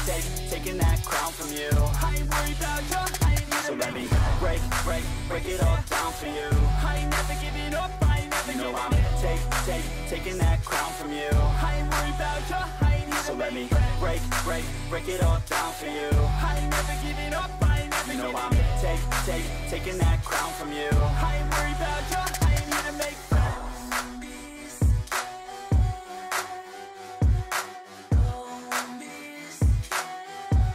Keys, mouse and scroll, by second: 25.5 ctrl+d, 27.7 ctrl+d.